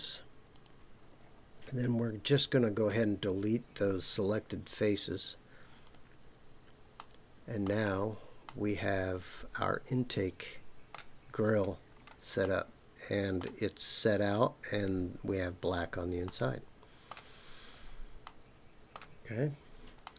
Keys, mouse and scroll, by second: 0.5 shift+click, 2.8 Delete, 6.9 middle click, 7.9 scroll down 3, 8.4-11.0 middle drag, 11.3-12.0 scroll up 4, 12.4-13.4 middle drag, 15.4-16.2 scroll down 4, 16.2 middle click, 17.4-17.8 scroll down 3, 18.2 middle click, 20.0 shift+middle click.